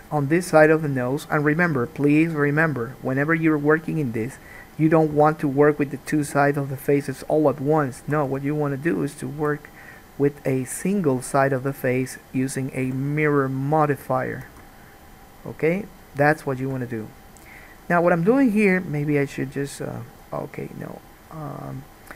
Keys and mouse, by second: 1.6 click, 1.9 g, 5.3 2, 5.4 click, 6.5 g, 8.3 alt+a, 8.5 1, 8.7 click, 9.6 g, 12.3 click, 13.0 g, 14.4 alt+middle click, 14.6 alt+a, 14.8-17.7 middle drag, 17.7-18.9 drag, 18.9-20.3 middle drag, 20.3 click, 20.5-22.1 middle drag.